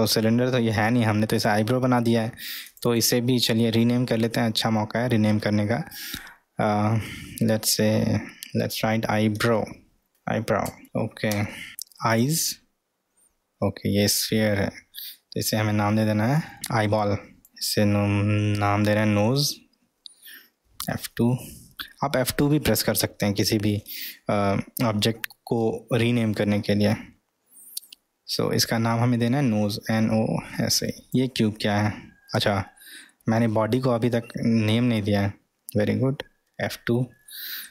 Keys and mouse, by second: 2.6 click, 2.9-11.7 drag, 15.3 F2, 17.4 click, 17.4 l, 20.5 F2, 31.1 click, 33.1-33.6 middle drag, 34.0-35.1 middle drag, 36.4 F2.